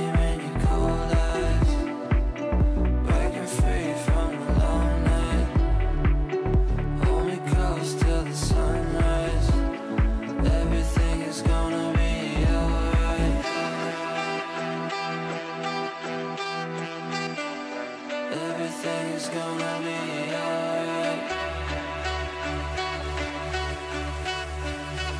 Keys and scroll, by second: 16.9 F9.